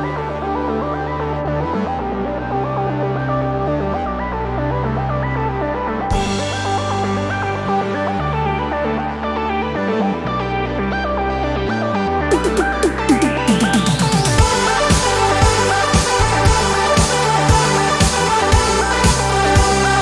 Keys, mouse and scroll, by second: 0.9 shift+click, 2.2 ctrl+KP_Subtract, 5.2 click, 6.6 ctrl+d, 7.3 ctrl+Up, 11.0 click, 12.0 click, 13.7 Up, 15.8-16.2 scroll up 2, 16.5 space, 17.3-18.0 ctrl+scroll up 4, 18.4 ctrl+space, 19.7 click.